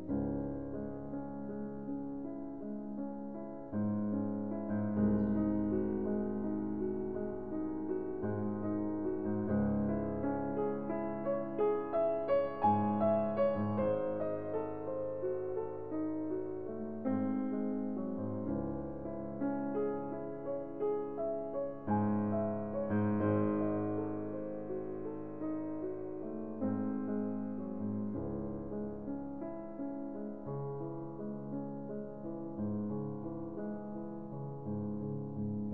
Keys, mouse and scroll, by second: 0.2 right click, 3.5 click, 5.7 click, 6.9 click, 8.8-10.0 drag, 10.4-11.6 drag, 11.7-12.9 drag, 14.2-14.6 scroll, 15.7 scroll, 16.5 ctrl+scroll, 17.6-18.5 scroll, 18.9-19.3 scroll, 21.3 click, 22.0 right click, 23.0 right click, 25.7-26.8 drag, 33.8 click, 35.4 middle click.